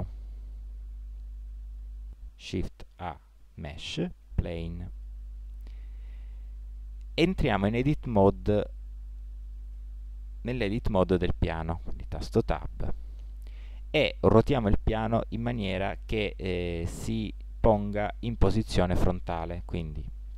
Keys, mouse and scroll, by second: 0.3 shift+a, 9.7 Tab, 17.7-19.0 middle drag.